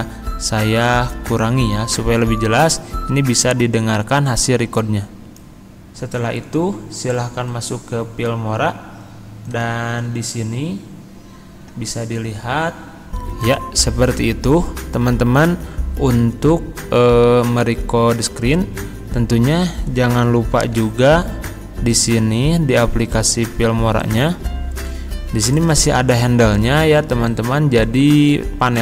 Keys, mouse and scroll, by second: 4.9 click, 13.1 click, 20.9 Tab, 22.4 Tab, 24.0 click.